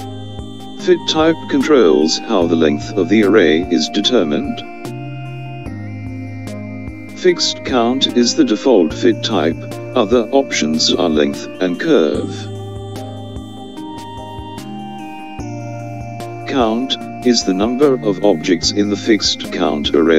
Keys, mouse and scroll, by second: 0.2-1.7 middle drag, 0.3 right click, 0.4 click, 1.1 right click, 1.7 click, 8.3 click.